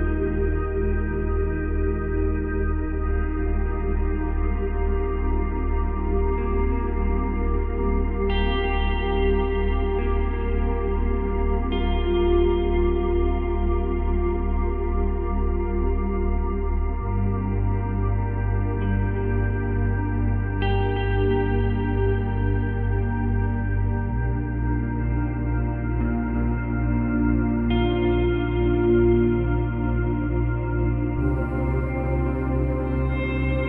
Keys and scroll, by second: 5.6 space, 6.6 space, 23.7 Delete.